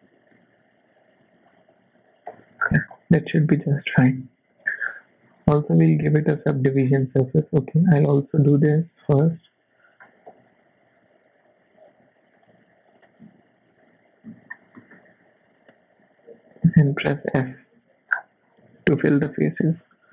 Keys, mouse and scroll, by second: 1.2 s, 2.3 f, 2.6-3.0 scroll down 7, 3.2 Tab, 3.8-4.2 scroll up 1, 4.5 click, 6.3 click, 6.7-7.0 scroll up 5, 7.0 middle click, 7.5 shift+middle click, 7.5 scroll down 1, 8.0 Tab, 9.3 alt+click, 10.0 scroll up 1, 10.3 e, 12.9 e, 13.9 KP_1, 14.3 z, 14.7 shift+middle click, 15.2 s, 17.4 f, 17.7 Tab, 18.1 scroll down 2, 18.6 z, 19.1 middle click.